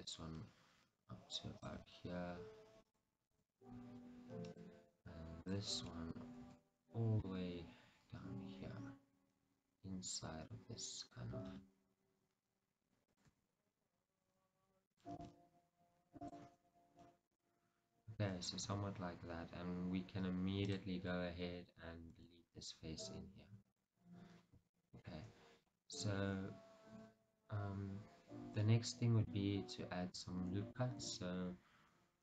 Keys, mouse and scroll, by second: 1.7-3.0 middle drag, 1.7 click, 2.9 s, 3.0-5.6 drag, 3.4 g, 6.0-11.5 shift+middle drag, 6.5 g, 11.5-13.3 drag, 11.5 s, 13.4 g, 15.1 click, 15.3 s, 16.4 click, 16.5 g, 17.5 click, 18.7 g, 20.8 click, 22.3 x, 24.4-24.8 scroll down 2, 24.8-32.2 shift+middle drag, 31.1 ctrl+r.